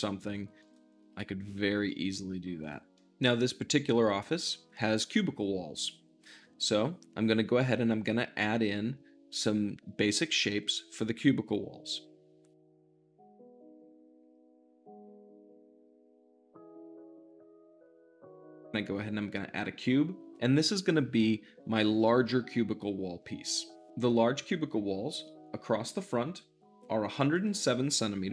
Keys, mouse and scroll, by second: 1.0 `, 1.6 g, 1.8 middle click, 2.5 drag, 2.8-12.9 middle drag, 12.9 `, 13.8-16.7 drag, 16.8 u, 17.2 Return, 17.4 click, 17.9 shift+middle click, 18.1 z, 18.6-28.3 drag.